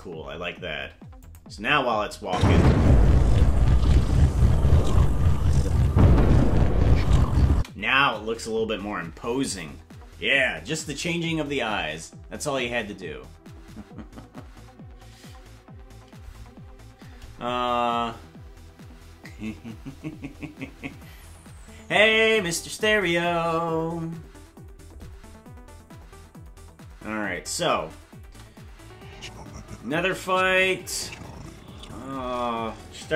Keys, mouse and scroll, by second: 0.0 click, 1.3 click, 2.2 space, 7.5 space, 27.4 click, 28.2 space.